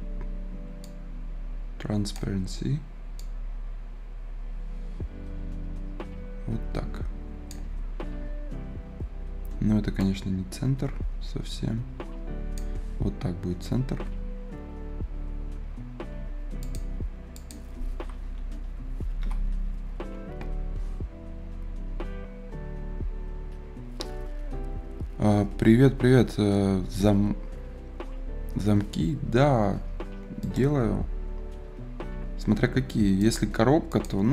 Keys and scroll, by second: 18.9 Return, 19.1 Return.